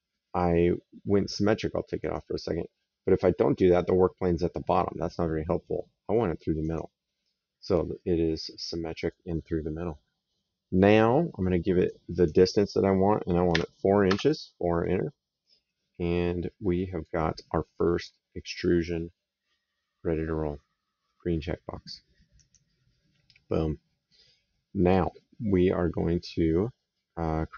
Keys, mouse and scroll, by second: 1.8 click, 6.5 click, 7.8 right click, 11.7 click, 13.3 KP_4, 13.9 Return, 15.5 right click, 17.1 middle click, 22.2 click, 23.3 right click.